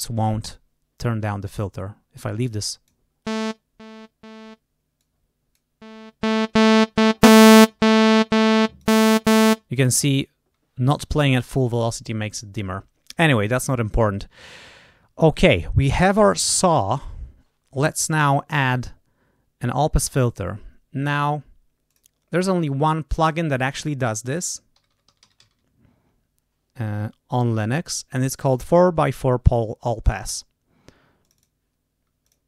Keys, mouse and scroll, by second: 1.7-3.0 drag, 4.9 click, 8.5 click, 17.7 click, 18.6 right click, 21.8 click, 23.2 click, 24.1-25.8 typing, 31.2 click, 32.2 click.